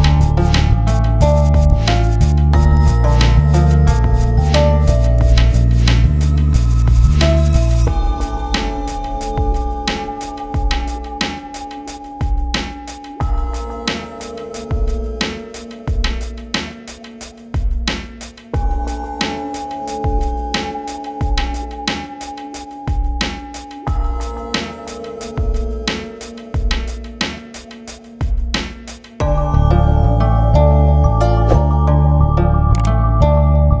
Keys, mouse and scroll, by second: 0.2-2.7 drag, 2.7 ctrl+g, 3.1 shift+click, 3.5-4.0 typing, 4.0-5.8 shift+drag, 6.0 shift+c, 6.1-8.9 shift+drag, 9.1 c, 9.4 click, 9.9 shift+F2, 10.7 scroll down 1, 11.3-21.0 drag, 21.0-23.3 drag, 23.5 shift+c, 23.7-28.1 drag, 28.1 shift+click, 28.3 c, 28.6-32.2 shift+drag, 32.3 c, 32.7 shift+click.